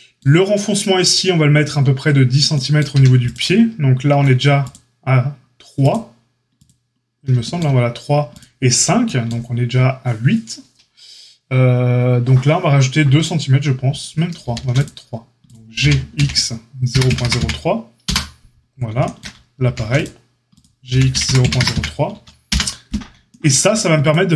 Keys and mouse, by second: 2.9 a, 8.2 click, 14.4 ctrl+r, 15.7 g, 19.6 ctrl+r, 20.8 g, 23.6 a.